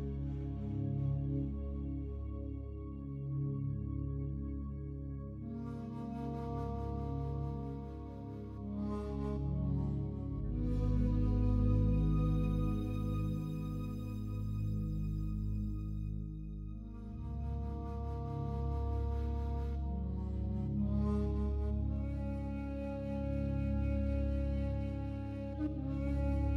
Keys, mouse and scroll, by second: 0.4 click, 0.6 typing, 0.8-2.1 drag, 2.2-3.7 drag, 3.9-5.8 drag, 5.9 click, 6.2-7.2 drag, 7.6-8.1 typing, 10.0-10.9 typing, 11.7 click, 13.8 /, 16.1-17.8 drag, 17.8 /, 18.8-20.8 ctrl+alt+drag, 20.3 ctrl+s, 21.4-24.1 ctrl+alt+drag, 25.2-26.2 drag.